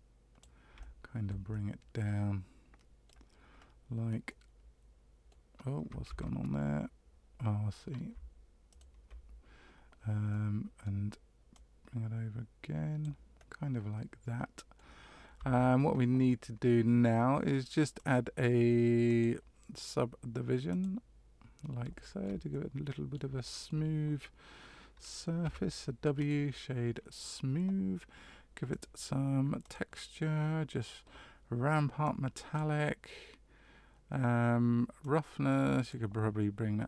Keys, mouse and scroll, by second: 0.8 shift+middle click, 1.5 middle click, 3.5 scroll down 1, 4.2 middle click, 6.1 ctrl+z, 8.7 shift+right click, 10.3 middle click, 11.5 click, 13.3 middle click, 15.3 Tab, 17.9 click, 19.0 click, 21.9 shift+middle click, 22.5 middle click, 23.4 shift+middle click, 25.4 w, 28.7 click, 29.6 click, 32.0 click, 35.0 click.